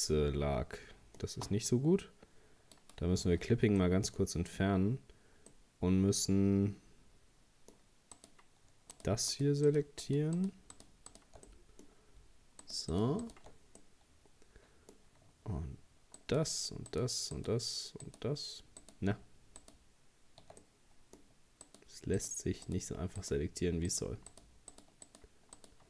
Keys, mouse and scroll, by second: 2.8-3.8 drag, 3.8 middle click, 4.2-4.6 scroll up 1, 5.5-8.1 middle drag, 8.1 right click, 8.9 shift+right click, 9.3 shift+right click, 9.7 shift+right click, 10.0 shift+right click, 10.4 shift+right click, 10.7 shift+right click, 11.1 shift+right click, 11.5-12.6 middle drag, 12.6 shift+right click, 12.9 shift+right click, 13.2 shift+right click, 13.8-16.2 middle drag, 16.2 shift+right click, 16.9 shift+right click, 17.3 shift+right click, 18.0 shift+right click, 18.8 shift+right click, 19.6 shift+right click, 20.6-21.6 middle drag, 21.6 shift+right click, 22.2 shift+right click, 22.7 shift+right click, 23.2 shift+right click, 23.9 shift+right click, 24.3 shift+right click, 24.7 shift+right click, 25.1 shift+right click, 25.6 shift+right click.